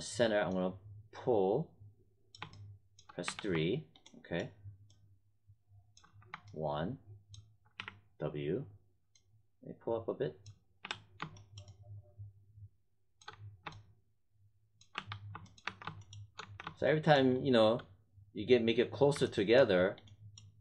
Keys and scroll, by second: 3.2 3, 6.0 1, 7.7 w, 10.8 3, 13.2 1, 14.9 3, 15.6 alt+1, 16.3 1.